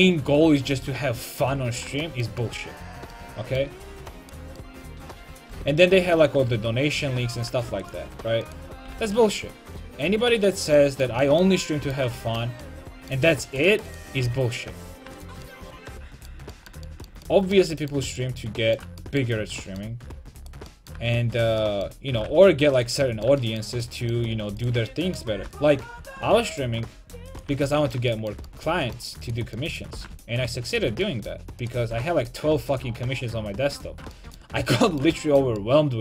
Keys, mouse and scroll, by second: 0.7 a, 1.1 middle click, 4.3-6.4 right drag, 5.5 g, 8.1 a, 8.5-10.5 right drag, 8.9 g, 10.8 click, 13.5 right click, 14.3 g, 15.5 click, 15.5 right click, 16.1 right click, 16.3-17.3 drag, 17.6 click, 18.1-19.2 middle drag, 19.7 middle click, 20.4-23.3 right drag, 22.2 g, 22.9 click, 27.3 g, 27.4 click, 27.5 a, 29.3-31.3 right drag, 30.1 g, 30.8 click, 30.9 a, 31.7-32.7 right drag, 32.0 g, 32.8 right click, 32.9 a, 33.1 middle click.